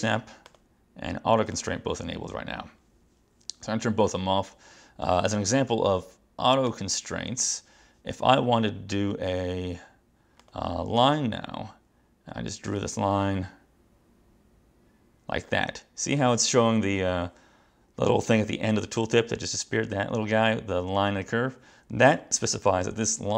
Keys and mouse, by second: 0.5 click, 1.6 click, 6.8 click, 10.5 click, 12.9 click.